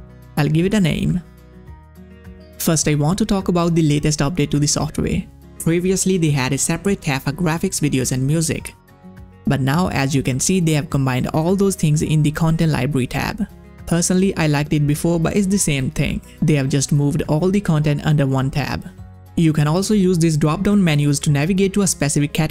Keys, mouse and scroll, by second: 0.7 click, 0.9-2.1 typing, 2.3 click, 9.0 click, 13.7-14.9 scroll down 1, 20.1 click.